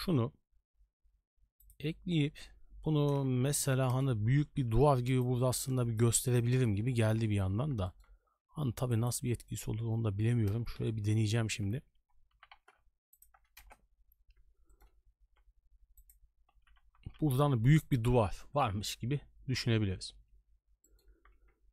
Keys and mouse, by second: 3.0 r, 4.5 s, 6.0 KP_6, 6.5 KP_3, 7.8 shift+middle drag, 8.3 g, 9.5-10.2 middle drag, 11.1 KP_3, 11.5 KP_1, 12.3 g, 13.6 KP_0, 14.7 shift+middle drag, 15.3 s, 16.5 g, 20.8 shift+middle drag.